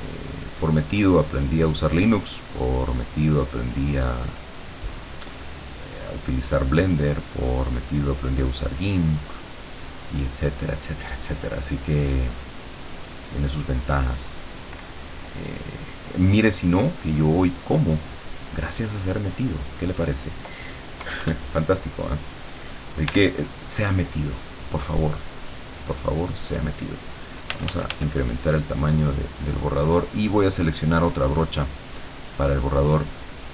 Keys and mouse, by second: 5.3-7.0 drag, 11.9-14.9 drag, 15.6 click, 17.0 click, 17.4-18.6 drag, 21.1 KP_Add, 21.7 middle click, 23.2 e, 24.3-26.8 drag, 27.6 f, 28.2-29.6 drag, 30.6 click, 32.3 click, 32.8 click.